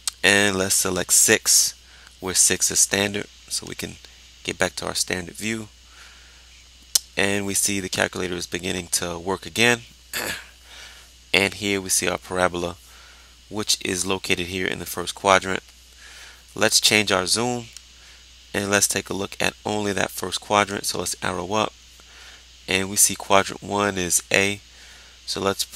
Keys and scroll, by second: 4.0 6, 20.6 Up.